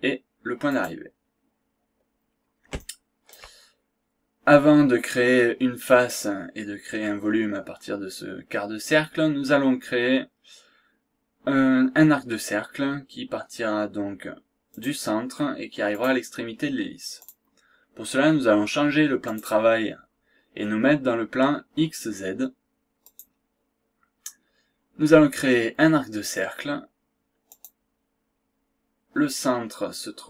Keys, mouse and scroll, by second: 0.6 click, 1.7-2.2 scroll up 1, 2.2 scroll down 1, 2.8 shift+right click, 4.0-4.4 scroll up 1, 5.3 scroll down 2, 6.1-6.5 scroll up 2, 6.8 scroll down 1, 7.9 scroll up 1, 14.7 click, 16.0 click, 16.4 scroll down 1, 16.6-17.2 scroll up 1, 17.2 click, 19.2 click, 23.2 click, 27.5 click.